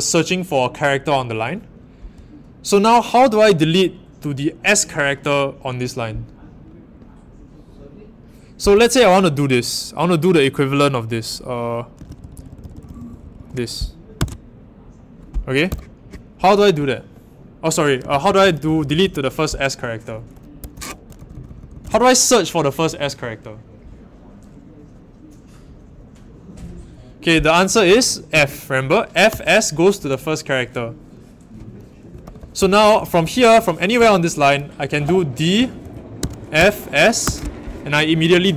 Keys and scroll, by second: 11.7-14.1 typing, 15.6 u, 17.7-19.5 typing, 20.6 Home, 20.7-21.7 typing, 28.3 f, 29.3 s, 31.8-37.7 typing.